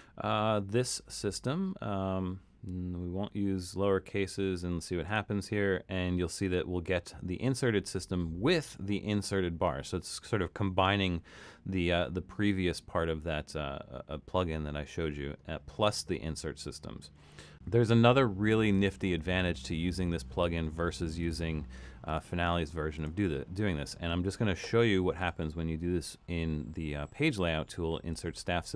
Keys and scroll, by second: 18.8 super+z.